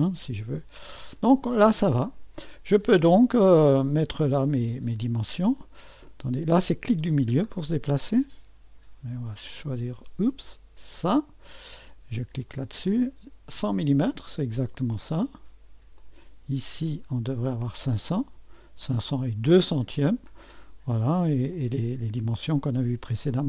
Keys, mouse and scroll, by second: 0.0-1.1 scroll up 2, 1.1-1.5 scroll down 1, 1.5-4.4 scroll up 2, 5.3-6.0 scroll up 2, 6.0-6.7 scroll up 1, 6.7-9.7 middle drag, 10.9 click, 12.5 click, 14.1-15.1 drag, 16.0 click, 17.5 click, 18.9-20.1 drag, 21.5 click.